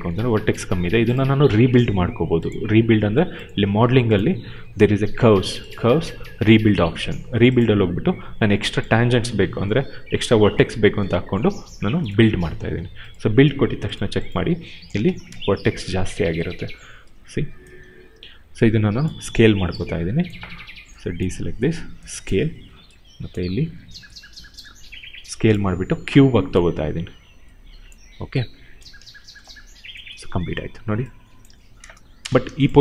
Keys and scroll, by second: 14.8 space, 17.8 r, 30.2 w, 31.3 ctrl+z, 31.8 space.